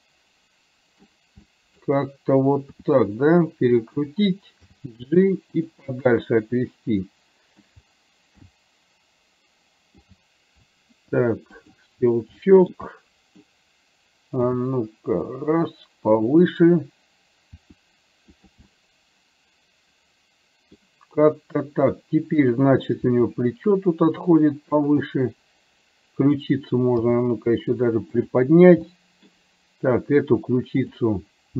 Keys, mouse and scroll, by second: 0.1-1.2 middle drag, 1.4-2.8 middle drag, 2.8 r, 4.8 g, 5.9-7.7 middle drag, 8.7 g, 12.6 shift+middle click, 12.9 middle click, 13.6-14.7 scroll down 1, 14.7 g, 17.7 r, 18.7-20.8 middle drag, 23.2 r, 25.2-26.4 middle drag, 27.2 g, 28.9 middle click, 30.9 click.